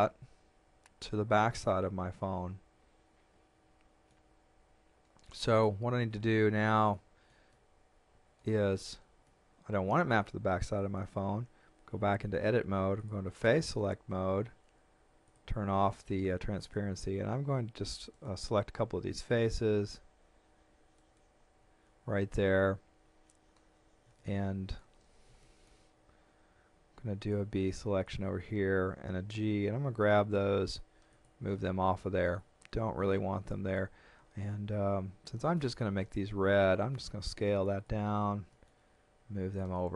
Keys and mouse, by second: 6.9 shift+middle click, 11.8 Tab, 13.0 click, 15.3 click, 16.6 right click, 18.1 shift+right click, 21.0 shift+right click, 24.2 shift+middle click, 25.5 shift+middle click, 26.9 b, 27.3 click, 29.3 g, 30.0 middle click, 31.1 click, 32.0 shift+middle click, 33.5 shift+middle click, 36.0 s, 37.3 click, 38.5 middle click, 39.5 click.